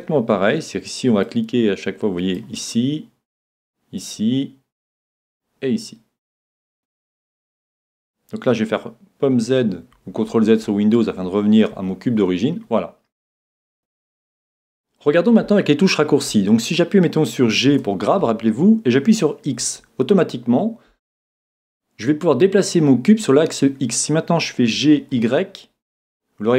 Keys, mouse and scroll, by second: 1.2 click, 3.3-6.8 drag, 9.6 super+z, 10.3 z, 10.7 z, 11.4 z, 11.8 z, 13.9 middle click, 17.7 g.